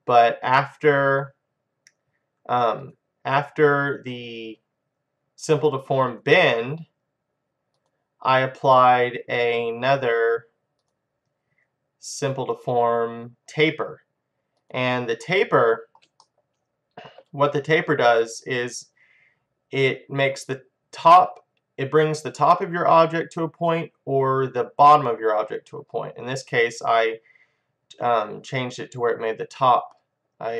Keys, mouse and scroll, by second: 1.0-16.5 drag, 16.5-21.6 middle drag.